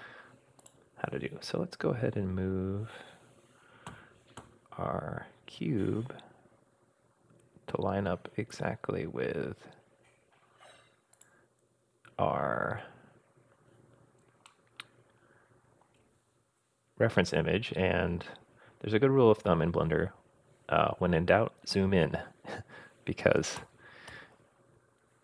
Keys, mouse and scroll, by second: 0.6 click, 3.9 g, 11.7-13.1 scroll up 6, 14.5-15.9 shift+middle drag, 15.9-18.0 shift+scroll up 1, 18.1-18.5 scroll up 2, 23.6 g.